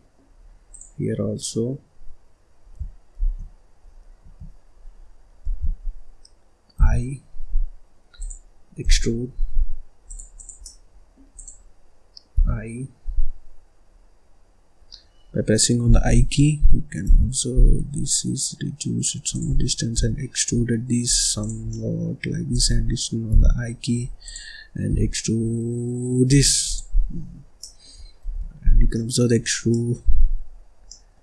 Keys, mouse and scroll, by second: 0.2-0.6 scroll up 1, 0.6 click, 3.1 shift+r, 4.1 Escape, 5.4 ctrl+z, 8.8 e, 10.3 click, 10.6 middle click, 11.3 click, 19.9 e, 21.3 click, 21.6 scroll down 1, 21.7 middle click, 22.2 scroll up 2, 22.5 click, 22.8-23.3 scroll down 3, 24.9 e, 26.6 click, 26.9-27.2 scroll down 2, 27.2-27.5 scroll up 3, 27.5 middle click, 28.2 ctrl+s, 28.7 scroll down 1, 28.9 middle click, 29.3-29.7 scroll up 4, 29.7 middle click, 30.4-30.7 scroll up 3, 30.7 scroll down 1, 30.8 middle click.